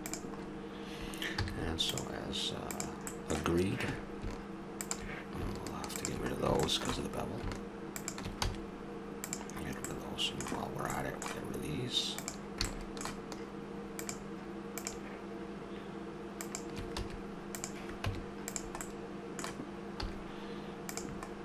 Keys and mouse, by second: 0.1 Tab, 1.4 z, 2.6-4.6 right drag, 6.3-8.5 drag, 8.5 x, 10.0 middle click, 11.0 middle click, 12.2-18.2 drag, 17.0 x, 18.1 Tab, 18.8-20.0 middle drag, 20.0 z.